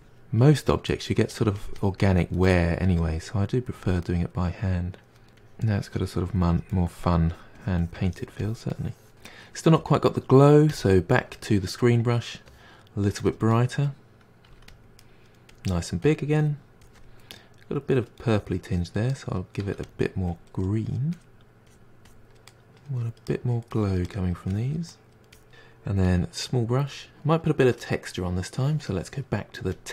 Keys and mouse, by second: 0.2-1.8 drag, 1.8-2.1 middle drag, 2.1-2.8 drag, 2.8 middle drag, 3.1-3.8 drag, 3.8-4.2 middle drag, 4.2-5.8 drag, 5.8-6.1 middle drag, 6.1-6.8 drag, 6.8-9.6 ctrl+middle drag, 10.1-11.9 drag, 11.9-12.5 middle drag, 12.5 f, 12.8-13.1 middle drag, 13.1-14.6 drag, 14.9-15.4 drag, 15.4 middle drag, 15.7 f, 16.1 click, 16.3 middle click, 16.6-17.7 drag, 17.7-18.1 middle drag, 18.1-18.5 drag, 18.5 middle drag, 18.7 drag, 19.0-19.3 middle drag, 19.3-19.7 drag, 19.7-20.1 middle drag, 20.1-20.4 drag, 20.4-20.7 middle drag, 20.7 drag, 21.0 middle drag, 21.3 drag, 21.5 middle drag, 21.7 drag, 21.9 middle drag, 22.2 drag, 22.5 middle drag, 22.7 drag, 23.0 middle drag, 23.3-23.6 drag, 23.6 middle drag, 23.9-24.3 drag, 24.3-25.4 middle drag, 25.8 f, 27.2 middle click, 27.6 click, 28.7 drag, 28.9-29.6 ctrl+middle drag, 29.6-29.9 drag.